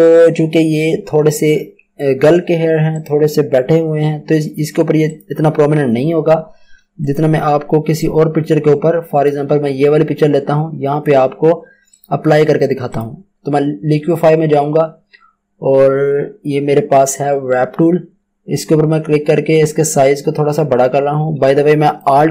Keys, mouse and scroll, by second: 2.9 click, 6.5 Escape, 7.0 click, 8.3 Tab, 11.0 space, 11.9 click, 18.7 click, 18.9 alt+right click, 19.1 Home.